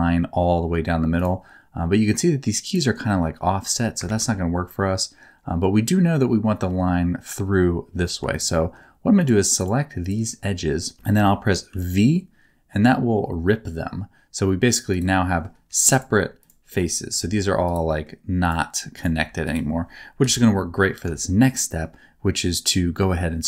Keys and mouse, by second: 2.6 click, 4.1 ctrl+z, 8.0 2, 9.6 middle click, 10.0 middle click, 10.5 middle click, 11.7 v, 14.9 click, 15.3 middle click, 15.6 3, 16.4 click, 16.7 middle click, 17.1 g, 17.9 middle click, 19.1 g, 20.2 KP_7, 21.2 shift+middle click, 21.7 shift+middle click.